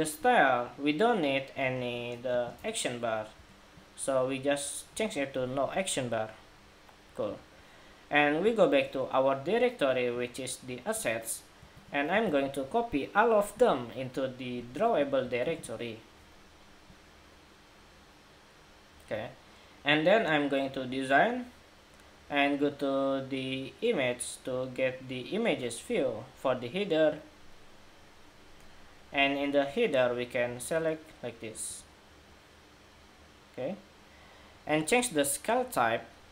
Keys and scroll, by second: 11.4 super+a, 15.2 super+v.